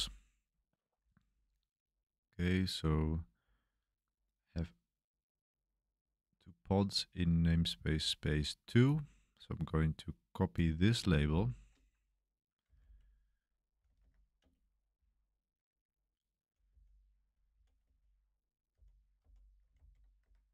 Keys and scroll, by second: 12.4-19.7 typing, 19.7 super+v, 20.2 Escape.